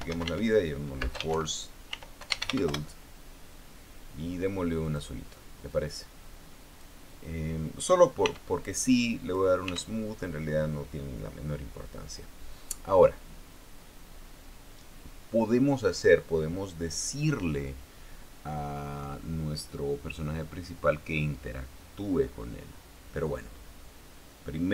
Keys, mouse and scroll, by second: 0.0-3.7 typing, 5.6 click, 6.4-7.7 drag, 8.9 t, 9.9 click, 10.4 t, 13.5-13.9 scroll down 2, 24.1-24.7 scroll up 2.